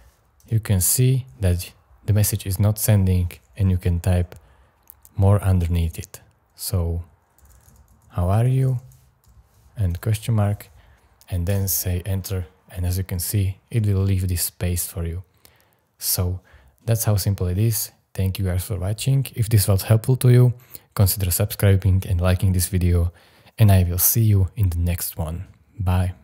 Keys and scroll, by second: 3.6 j, 4.0 o, 5.3 BackSpace, 7.1-10.1 typing, 11.4 Return.